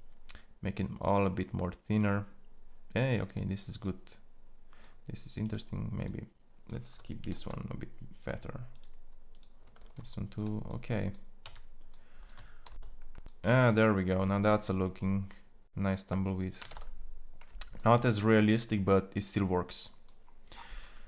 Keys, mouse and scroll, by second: 5.3-7.0 drag, 7.0 ctrl+a, 9.4 ctrl+a, 11.1 Tab, 12.4 shift+z.